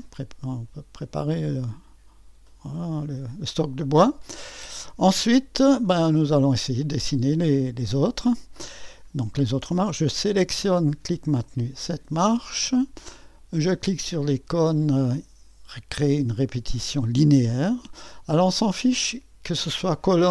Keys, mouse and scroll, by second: 1.4-2.2 typing, 5.2 middle click, 5.8-7.4 drag, 9.9-14.4 drag, 17.2-20.3 drag.